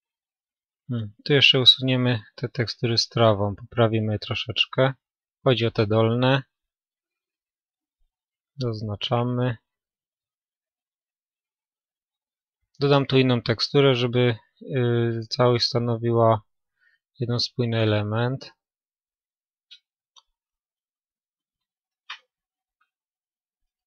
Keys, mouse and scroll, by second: 0.0-0.8 scroll up 1, 0.8-2.5 middle drag, 2.5-6.1 drag, 6.1-14.5 right drag, 8.4-10.1 middle drag, 13.9 middle click, 17.3 middle click, 17.3-23.8 right drag, 20.8-23.2 middle drag.